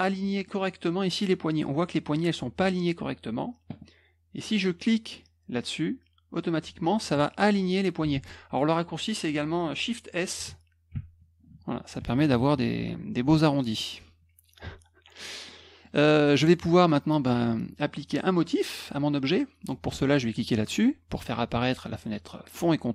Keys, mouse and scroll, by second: 0.2 middle click, 2.1 click, 7.0 click, 8.1 ctrl+z, 10.9 shift+s, 12.7 F1, 13.5 middle click, 15.4 middle click.